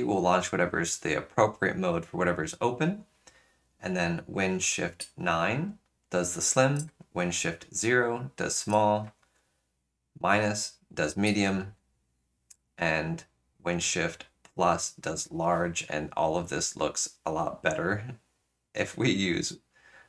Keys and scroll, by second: 9.1 shift+super+-, 11.5 shift+super+=.